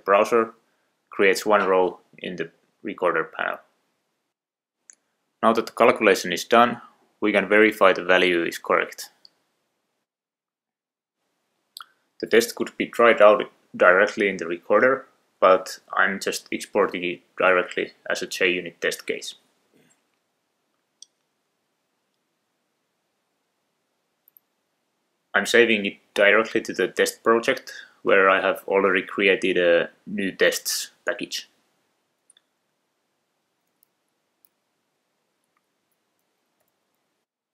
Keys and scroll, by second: 34.1 Left, 34.3 Left, 34.7 shift+Right, 35.5 shift+Right, 35.7 shift+Right.